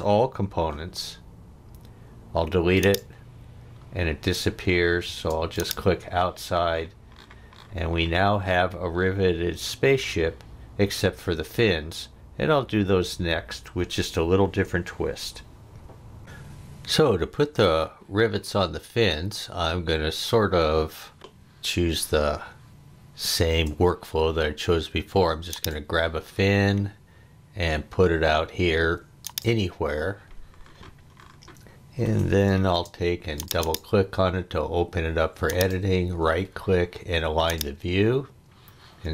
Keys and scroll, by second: 0.5 e, 5.1 space, 32.7 space.